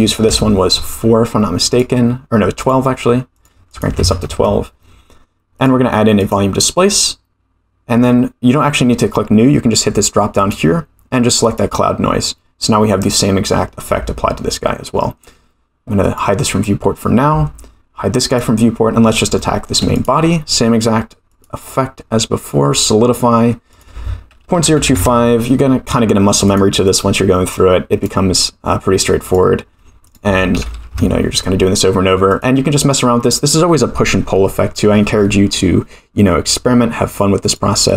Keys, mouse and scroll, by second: 1.7 click, 2.6 click, 3.3 click, 3.6-4.8 drag, 5.5-6.4 drag, 10.4-11.7 drag, 16.0 click, 18.3 click, 19.1 scroll down 2, 19.4 shift+middle click, 19.9 click, 21.2-22.8 drag, 23.7-25.5 drag, 26.4 click, 26.8-28.1 drag, 29.2-31.3 drag, 32.5 click, 33.2 click, 37.4-37.9 drag.